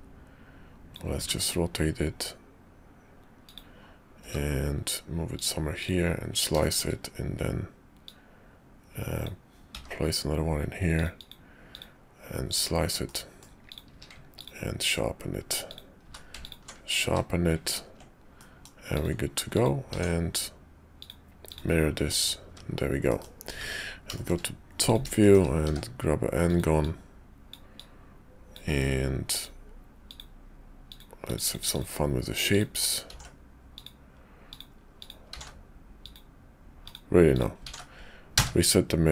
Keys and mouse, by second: 6.6 shift+click, 8.0-11.0 drag, 13.0 middle click, 13.7 click, 13.9 q, 15.7 click, 16.0 q, 17.0 q, 18.4 click, 18.9 click, 19.5 click, 19.9 alt+x, 21.0 click, 22.1 click, 22.5 `, 23.1 middle click, 23.6 `, 24.1 shift+click, 24.8 click, 25.2 shift+click, 25.6 d, 26.8 click, 27.8 click, 31.7 click, 32.5 click, 33.1 alt+x, 33.8 click, 34.5 click, 35.0 click, 35.3 alt+x, 36.0 click, 36.8 click, 37.7 alt+x.